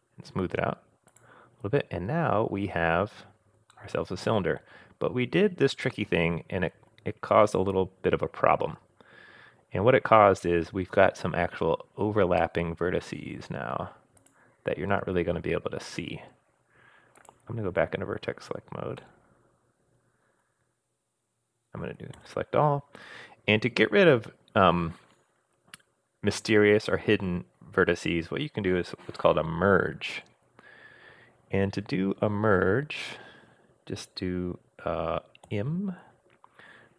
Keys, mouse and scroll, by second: 1.1 click, 1.7-2.4 scroll down 2, 2.8 scroll down 1, 3.7-7.0 middle drag, 6.9-8.8 scroll down 2, 10.5-11.0 scroll up 3, 11.6-12.4 scroll down 1, 12.4-13.7 middle drag, 14.2 click, 17.2 click, 18.4-18.8 scroll up 1, 19.0-20.5 middle drag, 20.4-21.7 scroll down 3, 20.9-21.7 scroll up 1, 22.2 a, 35.5 m.